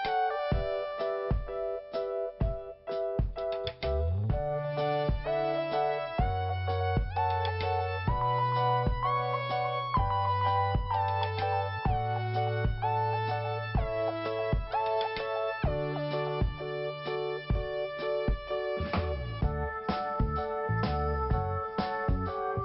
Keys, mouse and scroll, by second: 0.3 scroll down 1, 1.9 click, 2.0 click, 2.6 click, 5.0 ctrl+Delete, 6.6 click, 7.6 click, 7.8 click, 8.7-10.2 scroll down 1, 11.0 click, 12.9 click, 13.1 click, 15.4 click, 15.5 click, 15.9 click, 16.0 click, 18.2 click, 20.0 click, 20.1 click, 20.6 click, 21.7 scroll up 1, 22.3 click, 22.4 click.